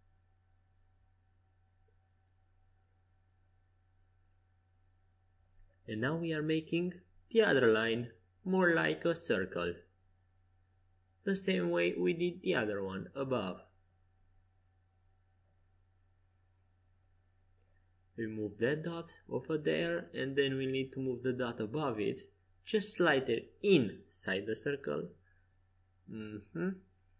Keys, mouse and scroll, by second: 0.7 c, 3.2 g, 5.0 Escape, 5.9 a, 9.5 c, 11.1 g, 14.9 a, 16.6 c, 18.1 g, 21.4 click, 21.7 a, 22.3 c, 23.3 g, 25.5 Escape, 25.9 a.